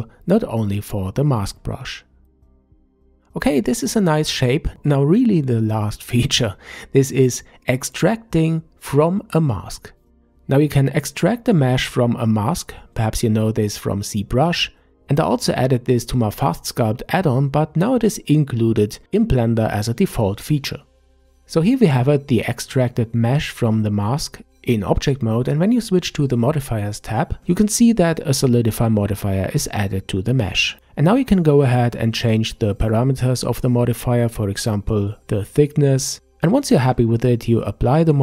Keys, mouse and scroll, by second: 0.4-1.3 middle drag, 1.3-4.3 scroll up 3, 5.7-8.8 drag, 21.3-24.3 middle drag, 25.3 click, 26.9-29.9 drag, 31.0-34.1 middle drag, 36.2 click, 37.2-37.6 scroll up 1, 37.8 Tab.